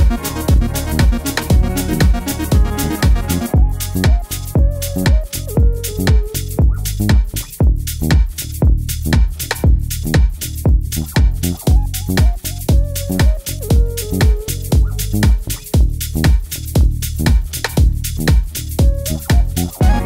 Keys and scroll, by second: 0.2 super+z, 6.3 super+c, 6.5 super+v, 8.4 Page_Down, 8.5 Page_Down, 8.9 Page_Up, 9.0 Up, 9.1 Up, 9.3 Right, 9.4 Right, 9.5 Right, 16.0 BackSpace, 16.0 BackSpace.